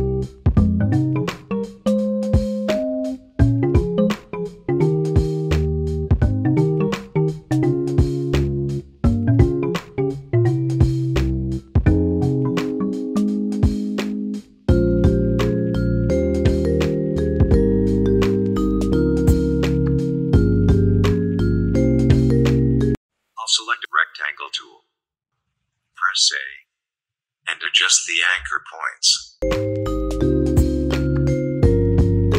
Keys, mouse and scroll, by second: 1.2-4.8 alt+drag, 4.8 ctrl+g, 7.9 click, 14.4 space, 14.6 click, 14.8 space, 15.8 click, 17.0 Left, 18.1-19.4 drag, 21.2-25.0 drag, 26.5-30.9 shift+drag, 31.8 click.